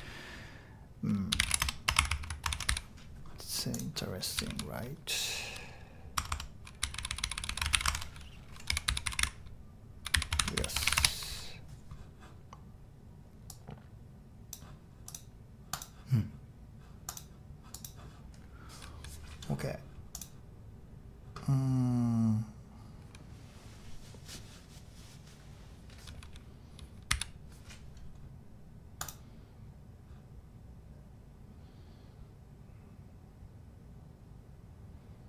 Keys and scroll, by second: 1.0-3.1 typing, 4.3 typing, 6.1 Tab, 6.3 Tab, 6.5-11.4 typing, 27.1 k.